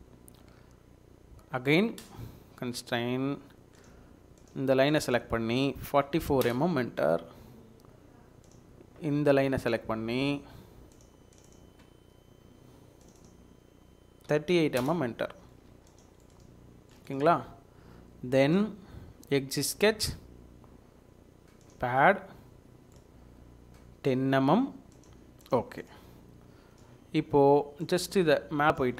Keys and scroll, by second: 5.9 typing, 6.4 Return, 14.0-14.9 typing, 15.5 Escape, 15.7 Escape.